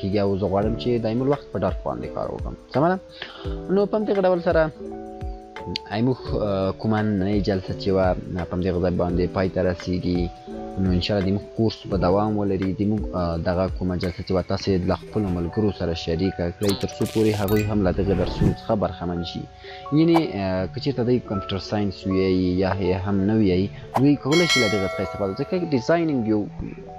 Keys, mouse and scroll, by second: 1.9 scroll up 1, 3.1 scroll down 1, 4.7 click.